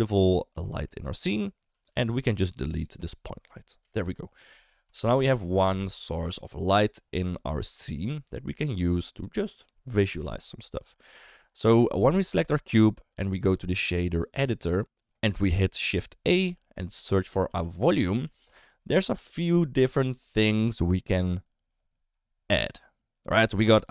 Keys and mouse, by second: 0.3 shift+middle drag, 0.6 middle drag, 1.0 shift+middle drag, 1.7 r, 2.4 g, 3.8 Delete, 4.6 middle click, 4.9 shift+middle drag, 5.5 shift+middle drag, 5.9 middle click, 6.2 shift+middle drag, 7.5 shift+middle click, 7.7 middle click, 14.3 click, 15.5 click, 16.2 shift+a.